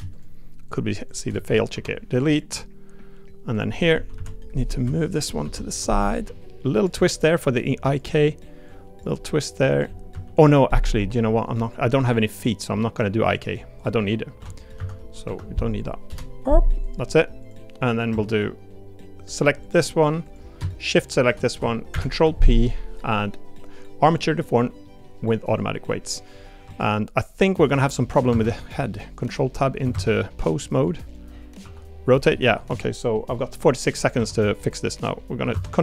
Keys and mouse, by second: 1.0 shift+click, 1.7 Delete, 4.1 KP_3, 4.1 KP_3, 6.2 g, 7.0 click, 7.1 middle click, 8.7 click, 9.1 click, 10.1 KP_3, 11.6 click, 12.7 middle click, 13.8 click, 14.8 a, 15.2 F3, 17.4 click, 18.1 Tab, 19.6 click, 20.9 shift+click, 21.9 ctrl+p, 24.8 middle drag, 26.1 middle click, 26.6 Tab, 27.5 click, 28.3 ctrl+Tab, 29.9 ctrl+Tab, 31.1 click, 31.6 r, 32.3 middle click, 32.7 Tab, 33.6 click, 34.1 Tab, 34.4 click, 35.5 ctrl+Tab.